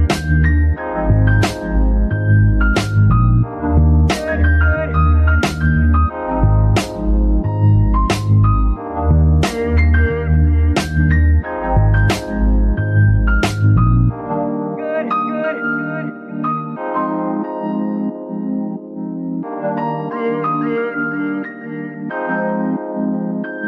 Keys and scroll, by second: 0.1 k, 0.2 Return, 2.2 Tab, 2.6 shift+s, 4.1 shift+s, 7.4 shift+s, 11.6 KP_3, 15.6 g, 19.0 g.